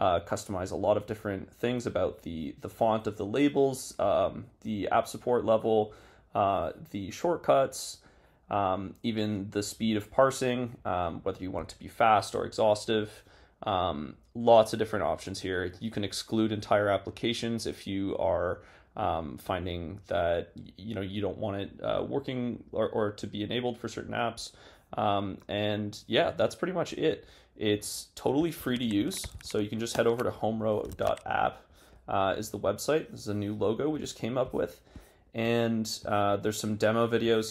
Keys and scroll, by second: 28.6 super+t, 30.9 super+s.